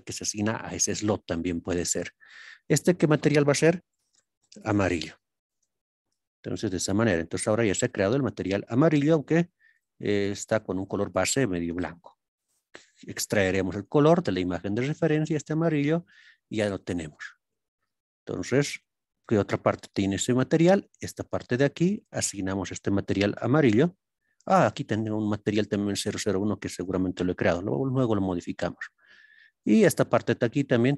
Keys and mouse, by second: 7.3 click, 7.8 click, 20.4 click, 21.9-26.9 drag.